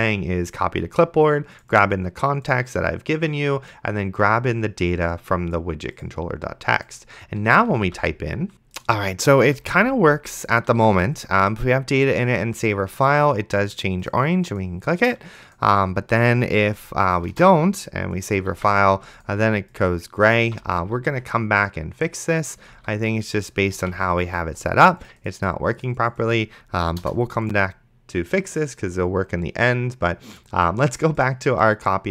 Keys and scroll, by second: 7.8 d, 8.5 ctrl+s, 9.5 d, 11.0 ctrl+s, 17.6 BackSpace, 18.8 ctrl+s, 20.5 d, 23.0 ctrl+s, 24.0 ctrl+s, 27.0 BackSpace, 31.1 BackSpace.